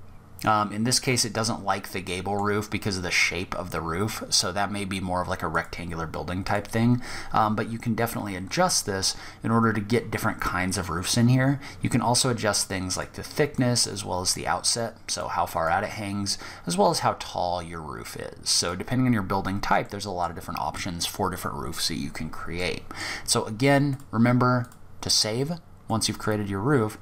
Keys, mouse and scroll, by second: 1.3 middle click, 4.7 click, 8.1-8.7 scroll up 2, 8.7-9.3 scroll down 1, 10.3 click, 12.8 click, 14.8 click, 18.5 scroll down 3, 19.0 middle click, 21.8 middle click, 23.1 click, 25.1 middle click, 25.9 scroll down 2, 26.2-27.0 scroll up 2.